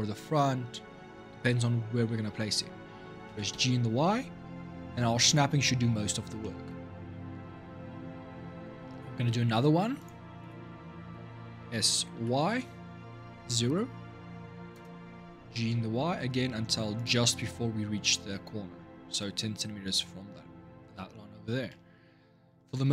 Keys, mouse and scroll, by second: 3.1 g, 6.2 shift+middle click, 6.8-7.7 scroll down 3, 7.7 scroll up 2, 8.9 ctrl+r, 11.4 s, 15.3 g, 22.6 ctrl+r.